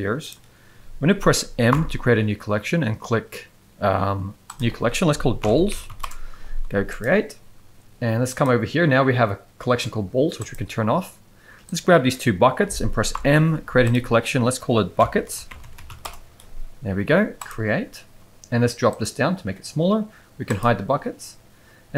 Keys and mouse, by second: 1.7 m, 5.8 l, 8.3 click, 10.4 click, 11.7-12.1 drag, 13.1 m, 18.9 click, 20.5 click.